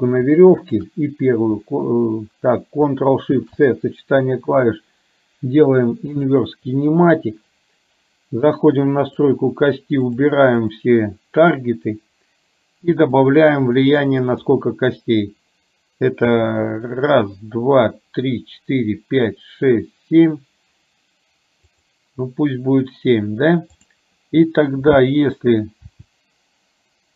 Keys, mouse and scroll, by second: 0.7 shift+click, 9.3 click, 10.8 click, 13.3 click, 13.9 click, 23.9 click, 26.0 r.